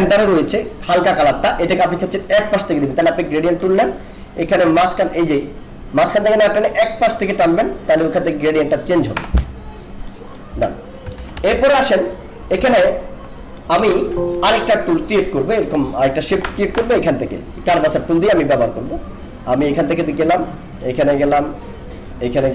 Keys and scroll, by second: 11.2 ctrl+-, 12.6 ctrl+=, 13.8 alt+space.